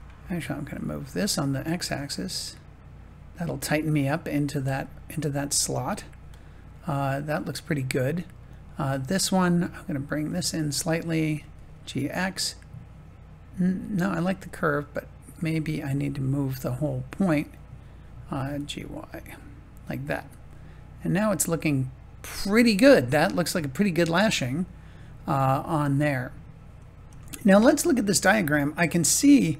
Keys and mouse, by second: 1.8 g, 2.3 x, 4.7-7.7 middle drag, 8.5-11.2 drag, 11.2 g, 11.5 x, 14.2 click, 18.4 g, 18.7 y, 19.8 click, 20.5-24.1 middle drag, 25.7 middle click, 27.2 shift+middle click, 28.2 middle click, 29.2 shift+middle click.